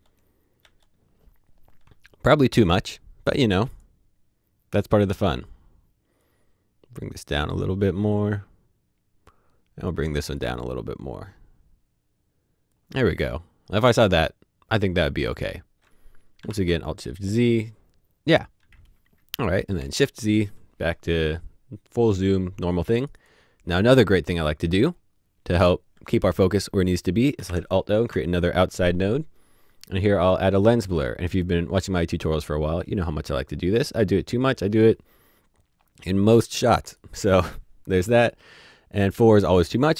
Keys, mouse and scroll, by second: 0.0-0.3 typing, 1.7 typing, 3.5 typing, 5.0 click, 6.2 click, 11.3 click, 16.3 click, 16.4 typing, 18.4 z, 19.7 z, 22.9 z, 24.5 click, 27.3 click, 32.2 click, 34.0 click, 34.7 click, 39.3 click.